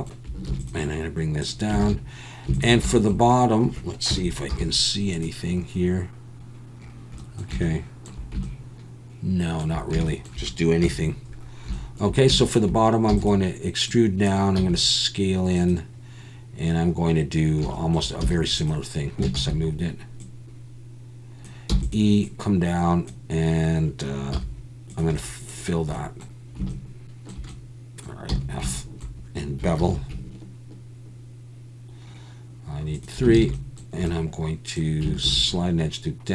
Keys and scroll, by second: 0.5 ctrl+r, 1.8 alt+a, 4.1 KP_1, 4.5 z, 10.8 KP_1, 13.1 e, 14.6 s, 18.2 e, 19.4 ctrl+z, 21.7 e, 24.3 z, 28.3 f, 29.8 ctrl+b, 33.4 alt+a, 35.2 ctrl+r.